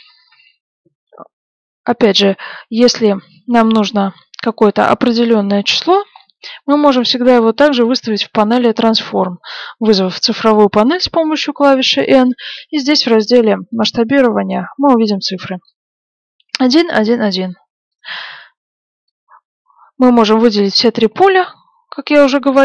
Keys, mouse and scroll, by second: 5.2-9.8 middle drag, 10.7 n, 19.2 click.